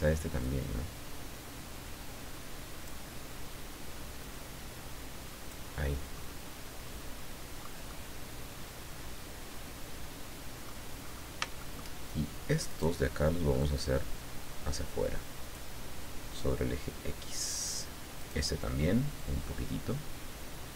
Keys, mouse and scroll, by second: 0.4-3.0 drag, 4.2-5.7 drag, 6.1-7.8 middle drag, 7.9-10.8 middle drag, 11.0-11.4 scroll up 3, 11.6 shift+middle click, 12.7 right click, 13.6-15.7 drag, 18.2 click, 19.2-20.7 drag.